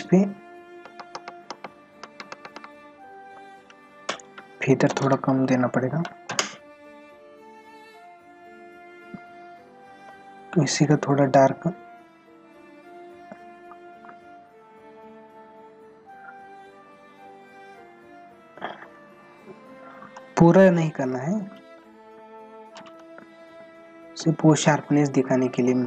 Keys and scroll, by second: 0.8 ctrl+alt+z, 23.8 ctrl+-.